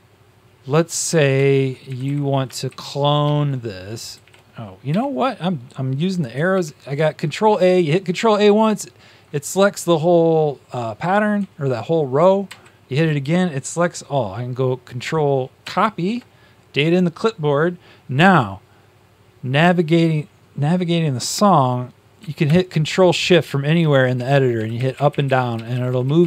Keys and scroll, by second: 1.3 Up, 1.3 shift+Tab, 2.6 Up, 2.6 shift+Page_Down, 3.2 shift+Down, 4.1 shift+Down, 4.1 shift+Up, 4.8 Home, 6.4 ctrl+a, 12.4 ctrl+a, 15.5 ctrl+c, 23.7 ctrl+shift+Down, 24.1 ctrl+shift+Down, 24.5 ctrl+shift+Down, 24.7 ctrl+shift+Up, 24.9 ctrl+shift+Up, 25.0 ctrl+shift+Up, 25.7 ctrl+shift+Down, 25.8 ctrl+shift+Down.